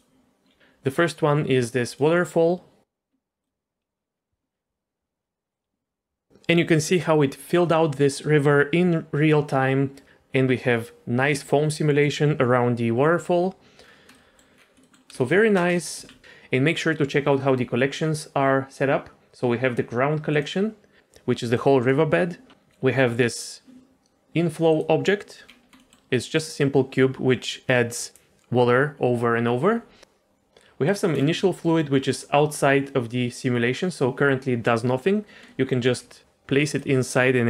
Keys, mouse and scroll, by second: 0.6 click, 1.9 click, 3.4 click, 13.9 scroll down 1, 14.1 middle click, 14.5 scroll down 1, 14.8 middle click, 15.1 space, 15.5 space, 15.9 z, 20.3 click, 21.5 click, 21.8 click, 24.7 click, 25.4 scroll up 2, 25.8 middle click, 26.2 middle click, 30.8 click, 31.1 scroll down 1, 31.4 shift+middle click, 35.4 middle click, 35.8 g, 36.9-37.4 middle drag.